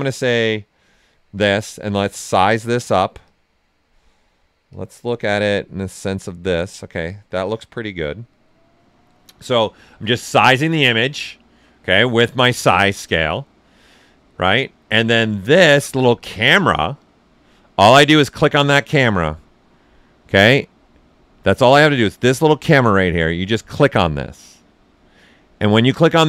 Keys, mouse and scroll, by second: 24.6 click.